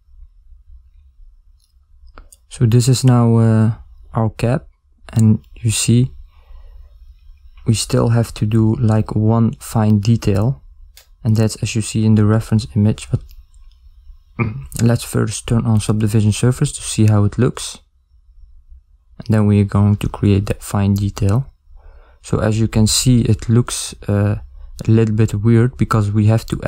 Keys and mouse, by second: 8.6 middle click, 8.6 z.